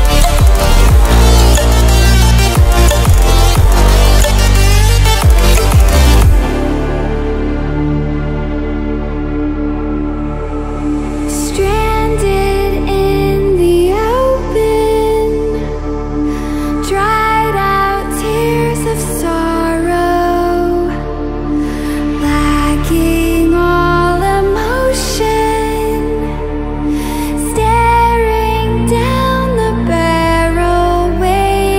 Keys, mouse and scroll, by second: 5.2-5.5 ctrl+alt+scroll up 1, 7.0 Left, 7.7 click, 10.6 click, 16.7-20.8 drag, 23.9 click, 25.1-25.7 ctrl+alt+scroll up 2, 26.7 drag.